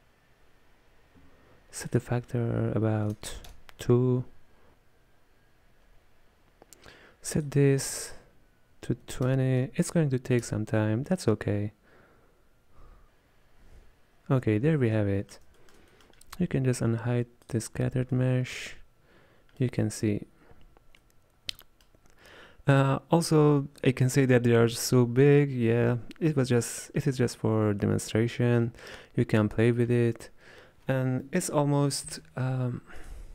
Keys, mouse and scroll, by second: 2.0-4.7 drag, 7.4-13.0 drag, 15.0-17.5 middle drag, 17.5 click, 18.3-20.1 middle drag, 20.1-20.9 scroll up 1, 20.9 scroll down 1, 21.1-28.8 middle drag.